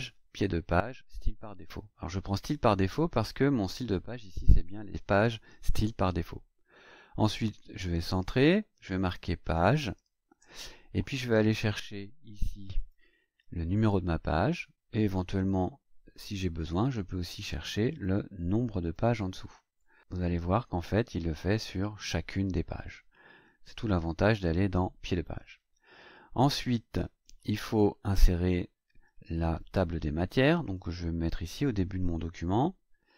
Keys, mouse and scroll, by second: 2.4 click, 7.9 click, 9.3-10.4 typing, 12.7 click, 13.7 click, 15.3 KP_Divide, 17.9 click, 18.8 click, 19.7 click, 20.1 click, 20.4-21.7 scroll down 8, 25.5-27.6 scroll up 10, 27.8 scroll up 2, 29.3 click, 30.7 click.